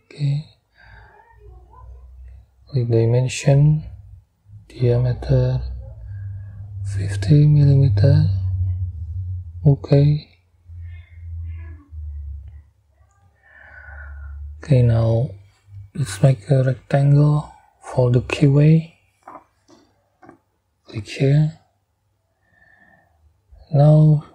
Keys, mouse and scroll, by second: 0.1 right click, 1.9 click, 4.4 click, 4.5 middle click, 6.2 5, 6.8 0, 8.6 middle click, 12.5 scroll down 2, 13.6-14.7 scroll up 6, 16.7 click, 19.0 click, 20.6 middle click, 23.3 right click, 24.1 scroll up 2.